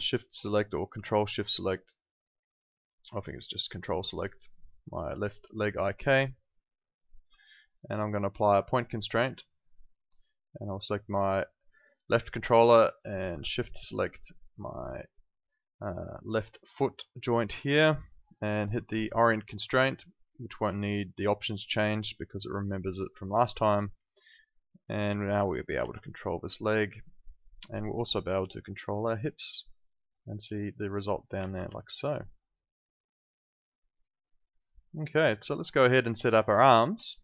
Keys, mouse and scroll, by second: 5.2 ctrl+click, 8.5 click, 16.5 shift+click, 19.3 click, 21.6 alt+click, 24.0 alt+click, 25.8 ctrl+z, 26.1 alt+right click, 26.4 alt+middle click, 26.6 alt+right click, 27.1 alt+middle click, 27.4 alt+right click, 28.4 click, 30.5 alt+click, 31.7 alt+click, 31.9 alt+right click, 32.1 alt+middle click, 32.4 alt+right click, 32.6 alt+click, 34.7 alt+middle click, 34.9 alt+right click, 35.1 alt+click, 35.5 alt+middle click, 35.6 alt+right click, 36.0 alt+middle click, 36.3 alt+right click, 37.0 alt+click.